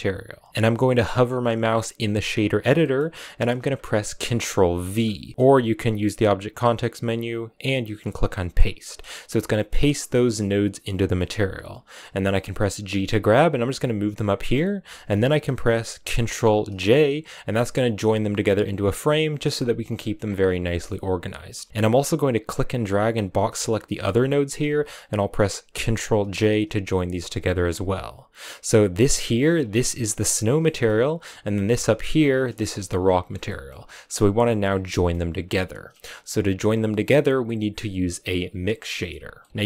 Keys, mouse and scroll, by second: 0.5 middle click, 1.4-2.7 scroll down 1, 2.7-4.8 middle drag, 4.8 ctrl+v, 5.8 w, 12.7 g, 14.1-16.6 middle drag, 16.6 ctrl+j, 17.2 a, 17.8 click, 19.8 middle click, 20.1-20.6 scroll down 2, 20.6 middle click, 21.3 a, 21.7 b, 22.3 click, 24.7-26.1 middle drag, 26.1 ctrl+j, 26.7 a, 27.2 click, 28.5 click, 30.5 middle click, 30.8-31.6 scroll up 5, 31.6 click, 33.2 scroll down 4, 33.3-34.6 middle drag, 34.6 scroll down 1, 34.8-39.6 middle drag, 36.4-38.8 scroll up 1, 39.4-39.6 scroll up 8.